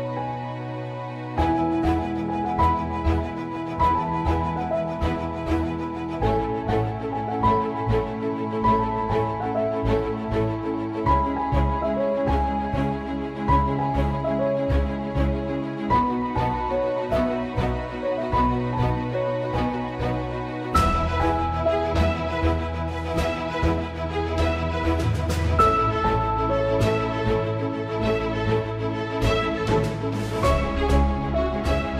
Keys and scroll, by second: 5.0 ctrl+z, 8.3 Caps_Lock, 11.3 alt+/, 13.6 ctrl+s, 27.7 ctrl+s, 29.2 ctrl+s, 31.5 ctrl+s.